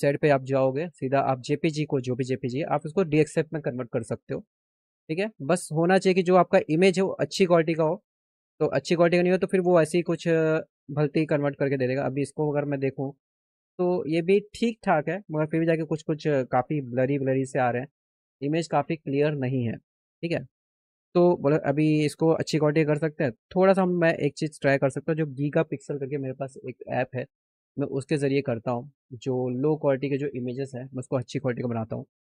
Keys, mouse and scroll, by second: 4.4 click, 6.0 click, 10.0 right click, 11.7 click, 18.8 click, 21.1 click, 25.6 click, 31.7 click.